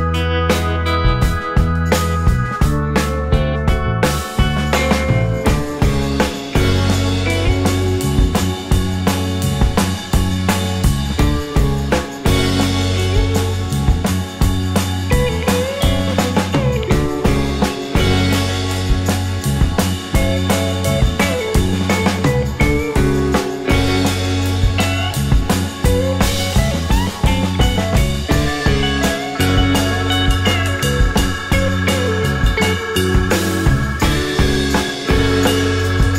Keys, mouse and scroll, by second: 1.3 right click, 1.6 shift+click, 2.8 w, 5.0 right click, 9.0 alt+middle click, 11.7 alt+scroll down 1, 11.9 alt+click, 12.5 alt+scroll up 1, 14.7 space, 15.2 space, 18.7-20.0 scroll down 1, 20.2 alt+middle click, 23.9-27.5 typing, 29.1-30.4 typing, 31.5-32.3 typing, 35.6 typing.